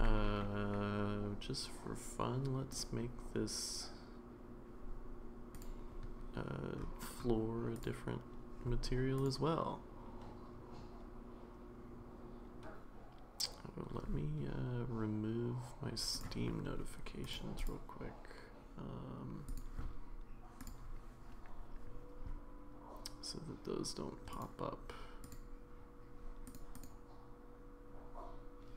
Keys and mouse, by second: 7.8 click, 9.2 click.